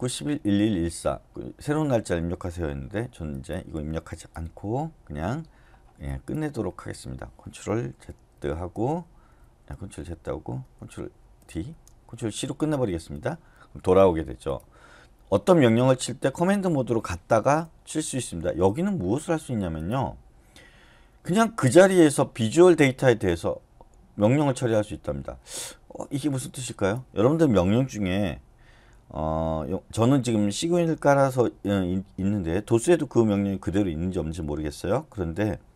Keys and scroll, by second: 4.4 Return, 6.6 Escape, 8.0 ctrl+x, 8.3 ctrl+z, 8.8 Return, 9.4 ctrl+z, 9.9 Return, 11.1 ctrl+d, 11.5 Return, 12.1 ctrl+c, 13.1 Return, 17.4 Return.